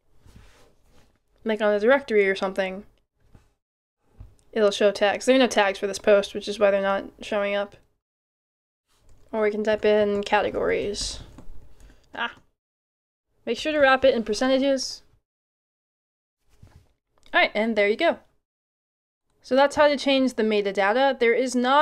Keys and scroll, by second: 0.0-0.5 typing, 9.4-12.5 typing, 13.6 shift+5, 14.5 shift+5.